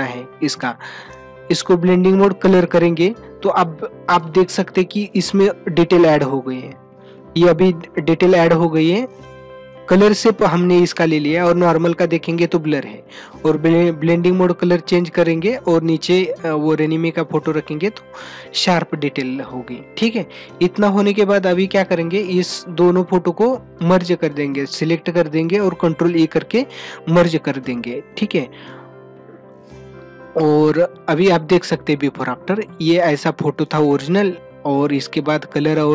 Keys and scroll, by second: 30.5 ctrl+-.